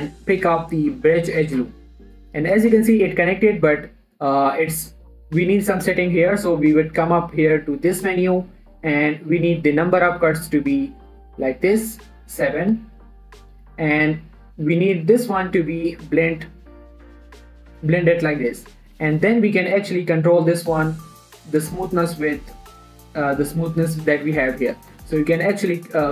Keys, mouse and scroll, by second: 2.9 scroll down 1, 3.0-5.2 middle drag, 5.2-5.8 scroll up 2, 7.4 click, 10.0-15.0 drag, 16.4 click, 17.0-17.9 scroll down 1, 17.9 middle click, 19.4 click, 20.4 right click, 21.0-25.7 drag, 25.7 middle click, 25.9 scroll up 1.